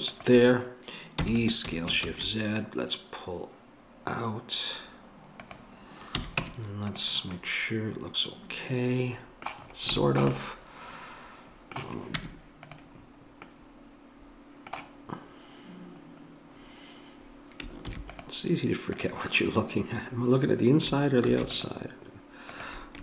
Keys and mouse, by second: 1.2 e, 6.1 a, 6.4 Tab, 12.2 Tab, 17.9 ctrl+r, 21.3 ctrl+r.